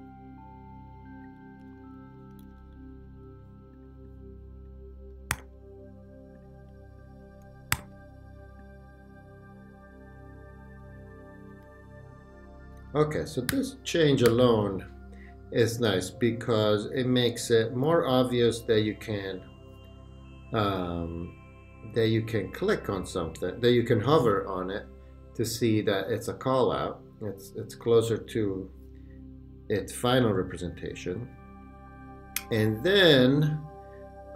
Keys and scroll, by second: 1.7 Left, 2.5 Up, 5.3 super+g, 7.8 shift+super+g, 8.3 super+g, 11.0 Left, 11.5 Right, 13.0 super+-.